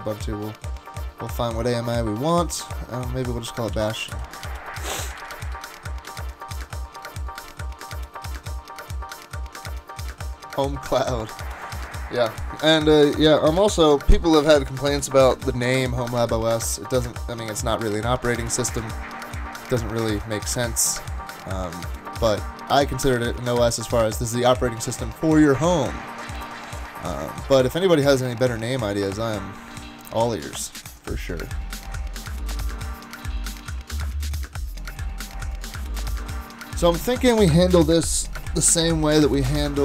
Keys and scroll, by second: 3.5-6.0 typing, 6.1 Up, 23.8 super+`, 24.4 super+`, 26.8 super+`, 28.6 super+`, 29.3 super+`.